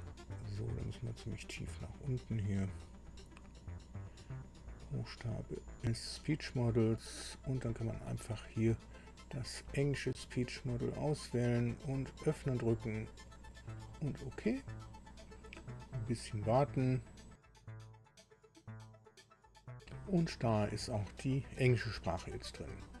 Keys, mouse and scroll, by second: 2.1-5.9 drag, 6.6 click, 9.6 click, 12.2 click, 13.8 click.